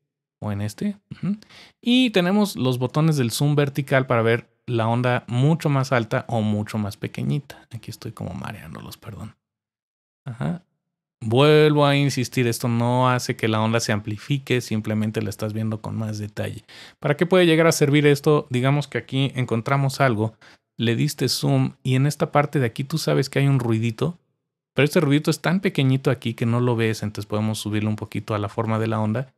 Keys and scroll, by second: 19.3 t.